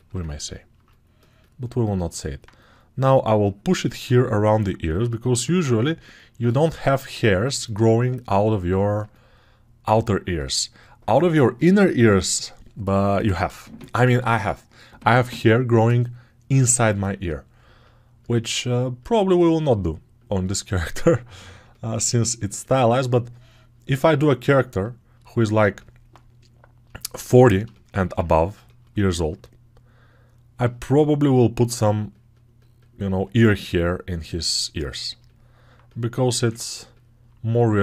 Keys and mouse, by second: 21.8-27.0 right drag, 27.0-37.8 ctrl+alt+drag.